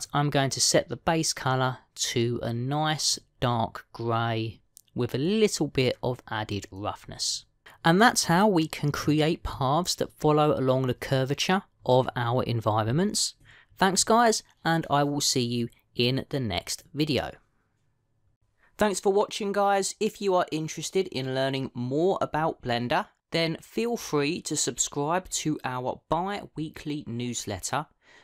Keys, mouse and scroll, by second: 0.8 click, 6.1 click, 9.1 middle click.